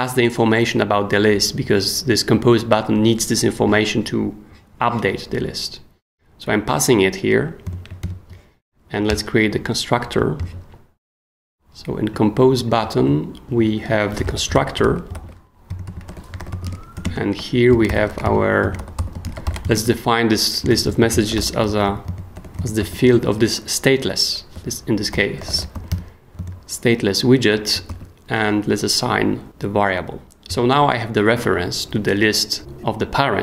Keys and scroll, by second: 7.7 super+Escape, 8.0 super+., 9.1 super+Return, 10.4 super+s, 14.0-23.5 typing, 24.5-26.4 typing, 27.9 super+s.